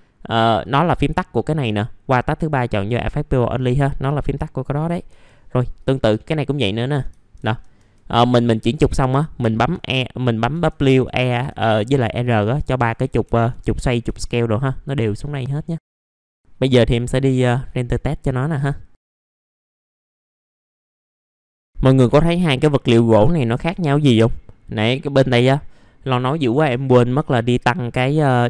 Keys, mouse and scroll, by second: 0.6 click, 5.1 r, 5.7 click, 8.3 typing, 12.3-13.0 typing, 15.4 click, 15.8 F4, 16.1 right click, 16.7 click, 21.1 middle click, 21.2 scroll up 1, 21.3 middle click, 21.4 scroll down 1, 21.5 scroll up 1, 21.6-21.9 scroll down 1, 22.1-22.5 scroll up 1, 23.4 middle click, 24.1-24.4 scroll down 1, 24.4 middle click.